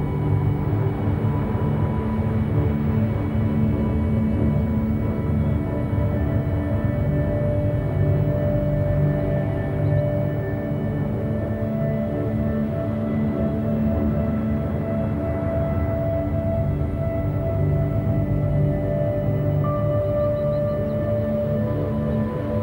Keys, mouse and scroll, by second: 0.2 s, 2.7 a, 2.9 a, 3.6 Tab, 3.8 KP_1, 4.9 Tab, 5.4 a, 5.6 a, 5.9 z, 6.1 b, 7.4-7.7 scroll up 2, 7.7 g, 9.1 a, 9.3 a, 9.6 z, 9.8 scroll down 1, 10.0 Tab, 10.5 s, 11.6-11.9 scroll up 1, 11.9 g, 13.7-14.3 middle drag, 14.3 a, 14.5 a, 14.7 click, 15.1-15.5 shift+middle drag, 15.5 scroll up 3, 15.7 Tab, 16.4 2, 16.5 click, 16.7 click, 17.4 shift+click, 17.6 shift+click, 18.9 shift+middle click, 19.7-20.1 scroll up 1, 20.1 ctrl+b, 21.7 a, 21.9 a, 22.0 scroll down 3, 22.2 Tab, 22.4-22.6 middle drag.